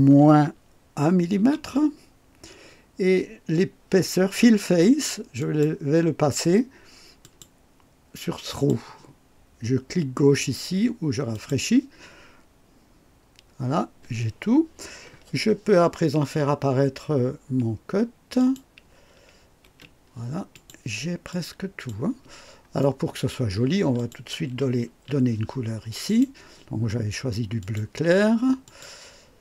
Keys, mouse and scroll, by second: 0.2 -, 1.4 KP_1, 5.4 click, 7.2 click, 8.5 click, 11.3 click, 18.4 click, 19.6 space, 20.5 click, 21.3-22.1 drag, 22.8-23.5 right drag, 24.0 click, 24.9 ctrl+d, 26.1 click, 27.6 click, 28.6 click.